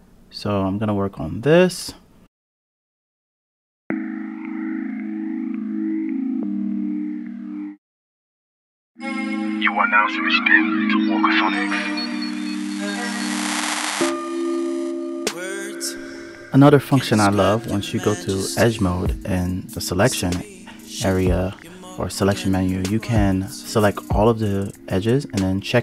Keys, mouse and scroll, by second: 2.7 click, 2.7 g, 3.2 g, 3.6 click, 3.9 g, 4.3 click, 4.5 ctrl+z, 4.5 scroll up 1, 4.8 click, 4.9 KP_Decimal, 5.0 scroll down 3, 5.1 click, 5.2 g, 5.8 click, 6.9 click, 7.0 click, 7.2 click, 7.2 g, 7.6 click, 8.6 click, 8.7 g, 8.9 scroll down 3, 9.2 click, 9.3 KP_Decimal, 9.5 click, 9.6 g, 10.2 click, 10.7 click, 11.4-11.8 scroll down 5, 11.5 click, 11.6 Tab, 11.8 click, 12.1 Tab, 12.3-14.5 typing, 12.4 click, 12.8 Tab, 12.9 scroll down 2, 13.0 click, 14.3 Return, 14.4 click, 14.6 scroll down 26, 15.0 scroll up 3, 15.2 click, 15.7 Tab, 15.8 g, 15.9 click, 17.7 ctrl+z, 18.8-21.4 drag, 22.3 click, 23.1 a, 23.9-25.8 drag.